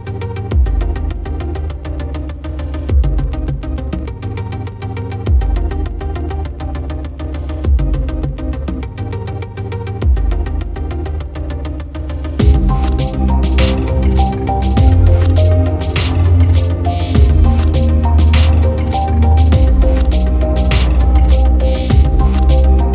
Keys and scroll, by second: 0.1 ctrl+j, 7.4 ctrl+=, 9.9 ctrl+alt+z, 13.0 ctrl+-, 16.8 ctrl+j, 17.0 ctrl+t.